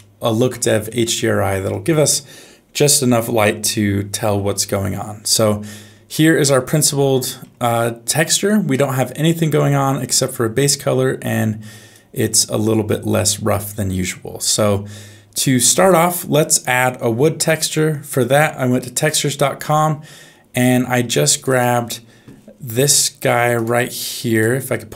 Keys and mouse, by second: 0.9 middle click, 6.2 middle click, 8.7 middle click, 11.9-14.4 drag.